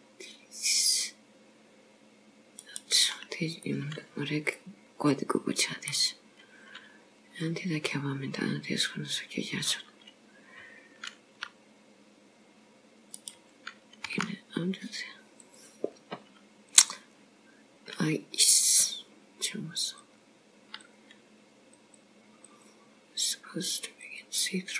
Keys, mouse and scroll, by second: 3.7 middle click, 11.4 r, 14.1 g, 16.8 click, 20.0 click, 20.9 click, 21.9 click, 22.5 click, 24.0 click.